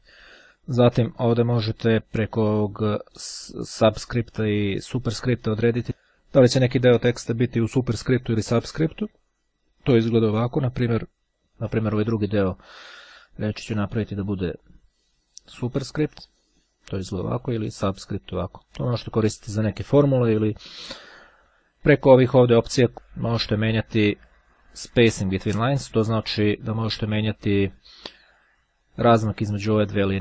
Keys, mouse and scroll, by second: 11.1 click, 14.2 click, 16.9-17.9 drag, 28.4 click.